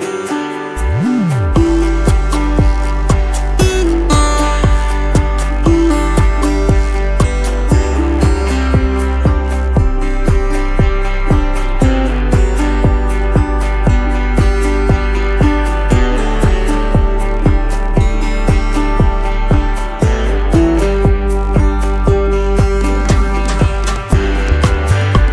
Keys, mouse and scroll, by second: 6.6-7.8 typing, 8.4 alt+Up, 11.3 alt+scroll down 1, 13.3 right click, 14.4 double click, 15.7 shift+click, 17.5 i, 19.5 space, 20.9 alt+scroll up 1, 24.6 shift+click.